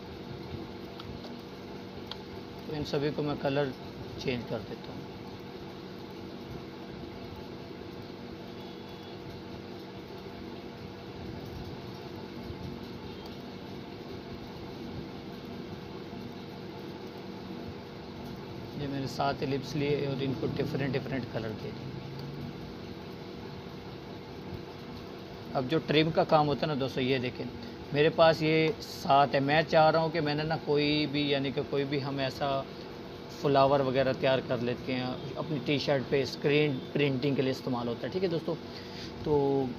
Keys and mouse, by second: 0.9-1.8 alt+drag, 2.2-3.1 alt+drag, 9.3 click, 22.3 click, 28.4-29.4 drag.